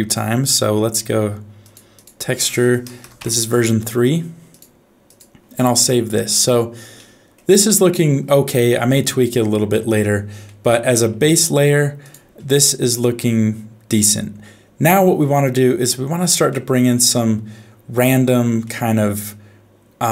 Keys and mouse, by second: 7.0 middle click, 10.5 middle click, 12.0 click, 16.5 middle click, 18.6-20.1 middle drag.